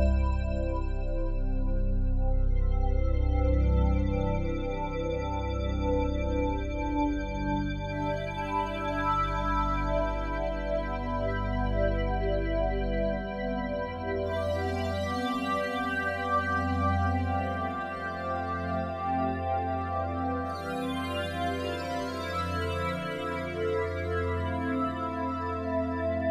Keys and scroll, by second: 4.1 ctrl+g.